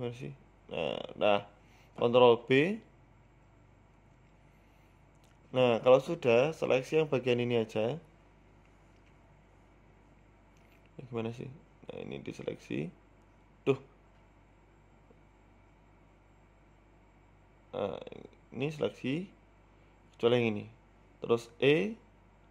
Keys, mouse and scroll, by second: 0.8 e, 3.1 ctrl+b, 5.8-6.1 scroll down 3, 6.1 shift+middle click, 6.6-7.0 scroll up 2, 7.0 middle click, 7.7 KP_1, 11.3 right click, 12.5 click, 13.1 right click, 13.3 shift+right click, 14.5 ctrl+z, 14.7 shift+right click, 15.2 ctrl+z, 16.2 alt+a, 17.7 alt+shift+Right, 18.0 a, 18.2 a, 18.5 alt+shift+Right, 19.2 c, 22.2 middle click.